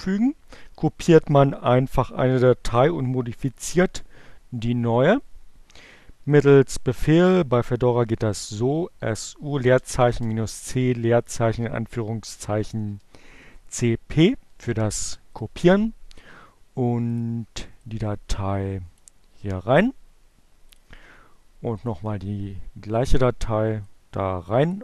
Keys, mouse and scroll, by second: 6.1-9.0 drag, 8.3-11.8 typing, 14.2 space, 15.2 click, 16.4 click, 17.5-18.9 drag, 20.3 click, 21.0 click, 22.2 click, 22.8-24.6 drag, 24.7 click.